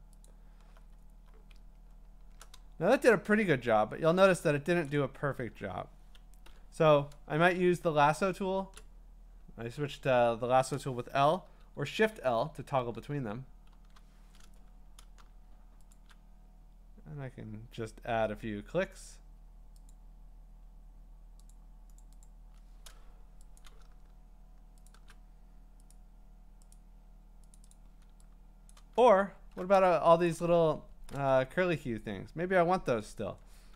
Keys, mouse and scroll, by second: 0.2 alt+click, 1.8-2.9 scroll, 3.3 ctrl+2, 3.5-4.1 scroll, 4.6-5.6 typing, 4.8 click, 11.4-13.7 typing, 15.9 shift+click, 19.1 click, 19.9 click, 21.5 click, 22.0 click, 22.2 click, 23.6 click, 24.9 shift+click, 25.9 click, 26.8 click, 27.6 click, 27.7 click, 28.7 click, 29.3 scroll, 30.6 ctrl+scroll, 31.9 scroll up 7, 33.5 q.